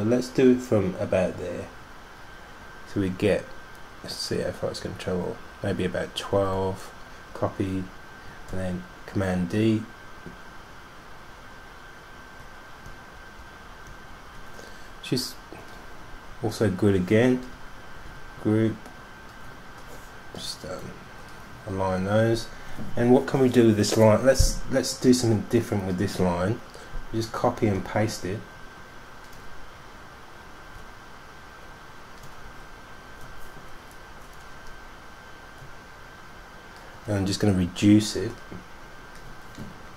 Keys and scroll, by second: 6.3-7.2 typing, 9.3 super+d, 9.9 super+d, 9.9 super+d, 10.1 super+d, 10.2 super+d, 10.5 super+d, 10.8 super+d, 11.0 super+d, 11.3 super+d, 12.1 super+d, 12.7 super+d, 18.1 super+g, 27.7 super+c, 27.9 super+f, 30.9 super+z, 32.6 super+z.